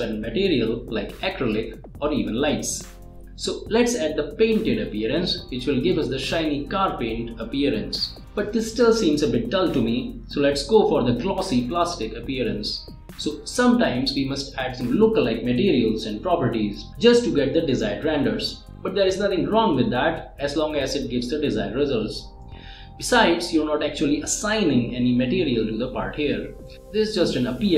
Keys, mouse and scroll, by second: 0.6-1.8 drag, 2.7 click, 3.7-4.4 middle drag, 5.0-5.5 drag, 8.3 click, 11.8 scroll down 1, 12.7-15.0 drag, 23.6 click.